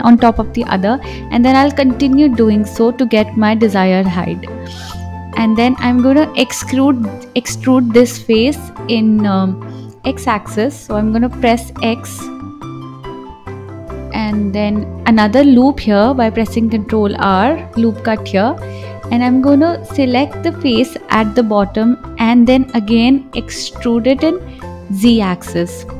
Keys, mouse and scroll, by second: 0.0 click, 0.3 scroll down 1, 0.8-2.0 middle drag, 2.0 click, 2.9 KP_1, 4.0 e, 12.2 ctrl+r, 14.7 click, 15.3-15.8 scroll up 1, 15.8-17.1 middle drag, 17.1 click, 18.6-20.6 drag, 21.4 KP_1, 22.5 e.